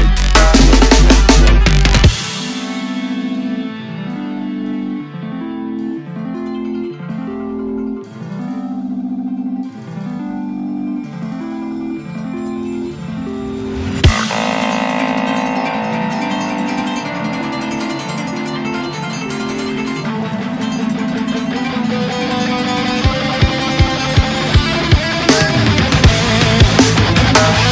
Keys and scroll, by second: 4.0 Return, 6.9 Tab, 16.3 Return, 19.5 ctrl+u, 20.0 ctrl+c, 27.1 Tab, 27.2 Tab.